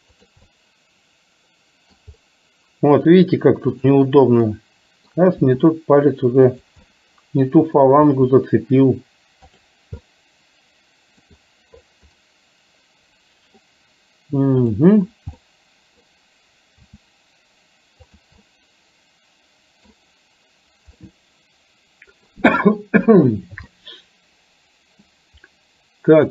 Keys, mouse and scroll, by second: 0.4-2.1 middle drag, 3.8 click, 4.6 middle click, 5.4 r, 6.9-7.9 middle drag, 8.2 r, 10.1-11.4 middle drag, 12.2-13.6 middle drag, 14.7 drag, 15.4-16.2 middle drag, 16.9 r, 18.6-19.9 middle drag, 21.1-22.3 middle drag, 23.7-25.2 middle drag.